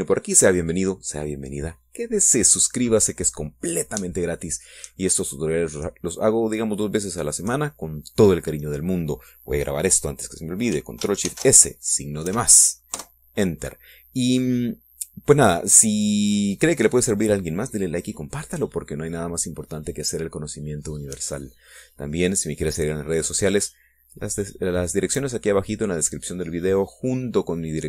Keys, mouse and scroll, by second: 0.0 click, 0.3 middle click, 0.6-1.0 scroll down 1, 1.2 scroll up 1, 12.4 ctrl+shift+s, 13.4 KP_Add, 14.0 KP_Enter.